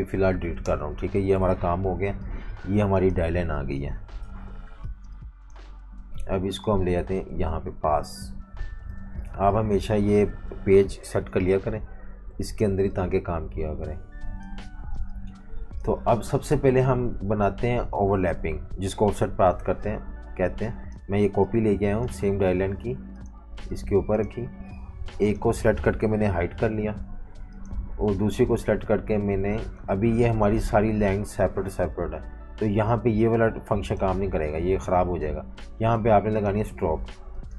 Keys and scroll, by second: 0.6 Delete, 1.4 super+-, 3.7 super+g, 4.2 super+-, 5.0 space, 9.3-11.0 typing, 14.6-16.7 typing, 26.3 super+3, 35.4 super+z.